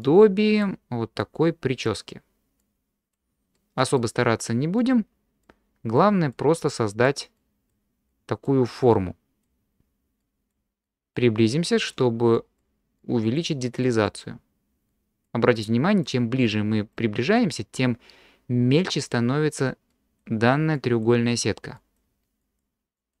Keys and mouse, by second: 0.0 click, 1.2 click, 2.6 click, 3.6 middle click, 4.8 click, 6.0 click, 6.7 click, 7.4 click, 8.1 click, 8.8 click, 10.2 click, 10.8 click, 11.7 click, 12.3 click, 13.0 click, 13.8 click, 14.9 click, 15.6 click, 16.4 click, 19.9 middle click, 20.8 click, 21.8 click, 22.4 click, 23.0 click.